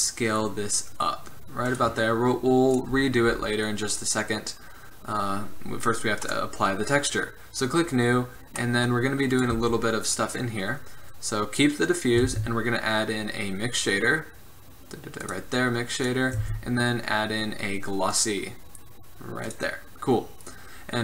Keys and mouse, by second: 7.9-9.5 drag, 9.5 right drag, 9.7 g, 12.4 shift+a, 16.2-18.2 drag, 16.5 shift+a, 20.6-21.0 drag.